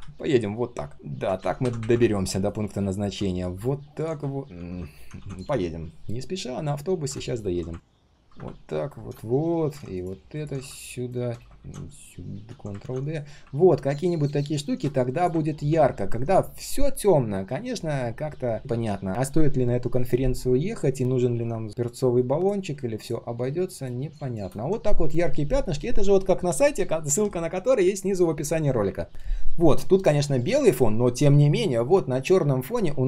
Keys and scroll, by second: 4.5 ctrl+z, 5.1 ctrl+d, 7.8 ctrl+d, 11.5 ctrl+z, 12.8 ctrl+d.